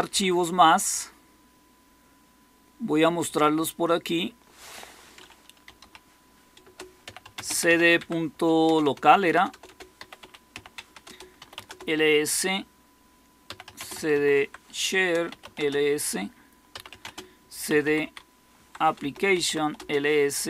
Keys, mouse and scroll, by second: 5.3-11.4 typing, 6.5 Return, 10.7 Tab, 10.9 Return, 11.6 Return, 13.1-20.0 typing, 14.9 Return.